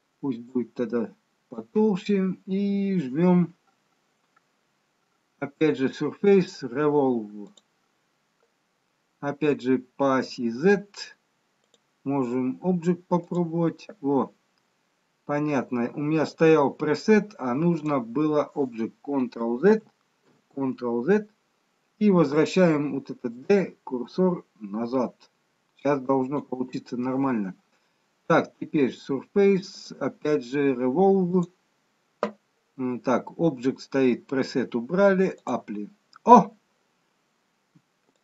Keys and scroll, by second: 0.1 d, 20.5 ctrl+z, 22.7 d.